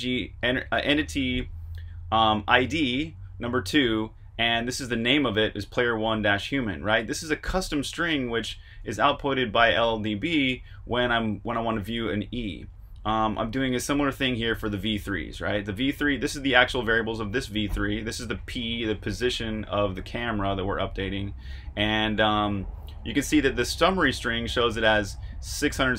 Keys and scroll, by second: 9.8 super+Tab.